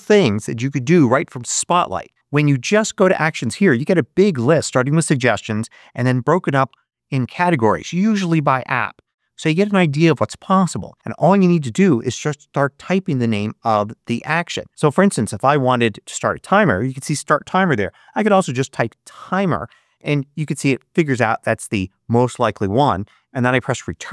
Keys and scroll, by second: 17.3-18.7 typing, 23.3 Return.